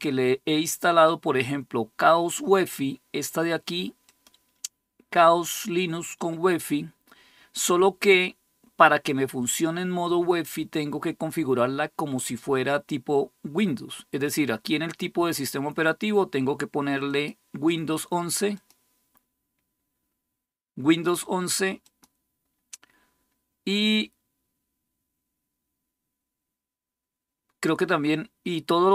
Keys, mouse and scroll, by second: 16.9 click, 18.3 click, 18.9 click, 21.6 click.